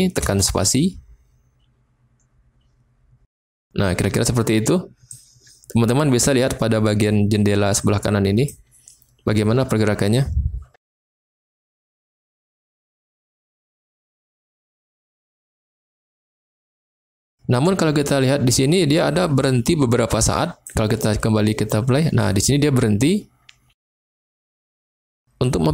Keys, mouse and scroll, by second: 0.2 space, 3.4 space, 5.1-6.2 drag, 7.7 click, 11.4 click, 13.0 space, 16.1 space, 19.2-20.6 drag, 20.6 space, 23.9 space.